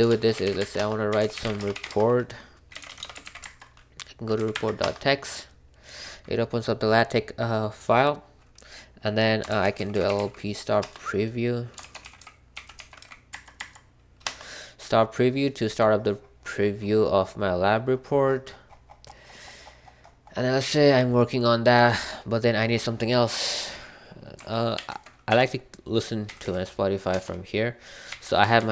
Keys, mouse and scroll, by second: 0.0-4.8 typing, 9.6 typing, 10.7 Return, 10.7-13.4 typing, 13.5 Tab, 14.2 Return, 14.6 typing, 18.9-19.8 scroll up 1, 19.8-21.6 scroll up 1, 19.8 typing, 21.6 scroll up 1, 21.7 typing, 24.7 ctrl+b, 25.2-28.7 typing, 27.1 Return.